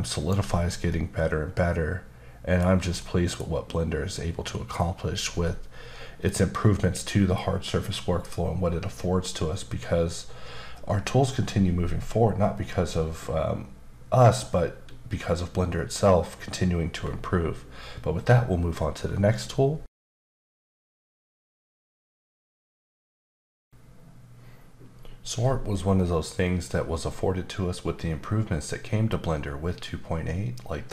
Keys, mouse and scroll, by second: 0.9 middle click, 3.0 middle click.